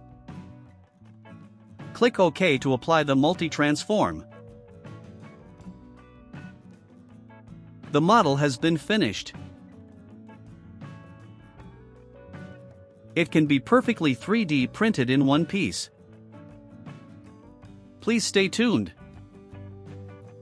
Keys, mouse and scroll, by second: 4.1 click, 8.9 click, 9.4 click, 10.1 right click, 10.7-20.4 drag.